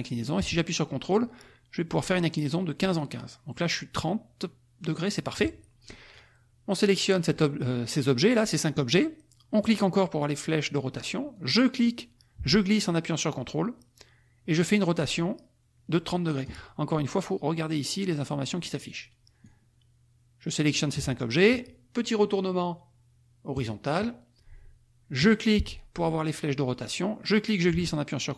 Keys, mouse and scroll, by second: 5.9 ctrl+click, 6.3-7.4 drag, 9.7 click, 11.3-16.6 drag, 19.4-20.9 drag, 23.5 click, 25.2 click, 27.3-28.3 drag.